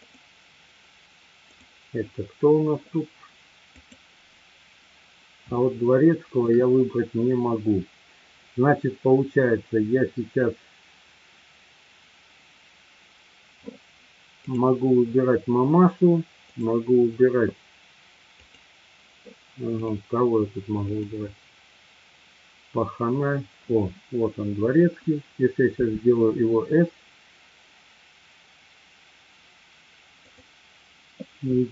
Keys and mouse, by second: 0.0 click, 3.8 click, 5.6-6.4 shift+middle drag, 16.5 click, 18.3 click, 19.9 click, 20.8 click, 30.3 click.